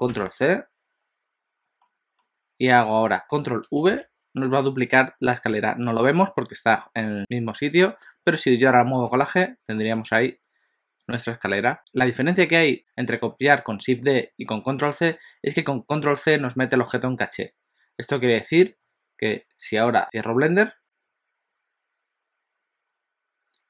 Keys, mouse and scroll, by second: 0.2 ctrl+c, 1.8-3.2 scroll down 4, 3.2 scroll down 1, 4.0 ctrl+v, 9.0 g.